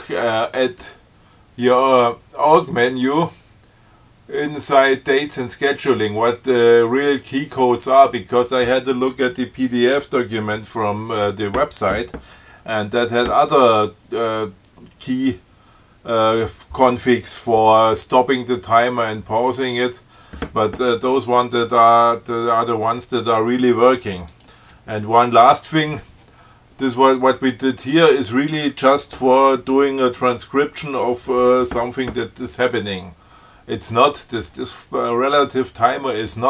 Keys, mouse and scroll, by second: 2.9 click, 24.6 click.